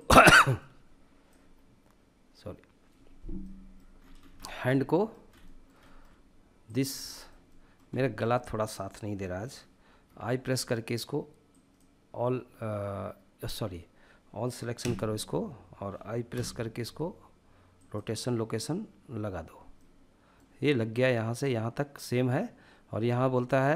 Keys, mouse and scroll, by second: 0.2-2.4 drag, 2.8-3.3 middle drag, 3.3-3.7 scroll up 2, 3.7-4.7 shift+middle drag, 4.7 scroll up 1, 4.8-6.0 shift+middle drag, 6.0-6.5 drag, 6.5 shift+middle click, 7.3-7.7 middle drag, 7.8-8.3 shift+middle drag, 9.2 i, 15.7 a, 15.7 i, 19.2-20.9 middle drag, 20.9-23.7 drag.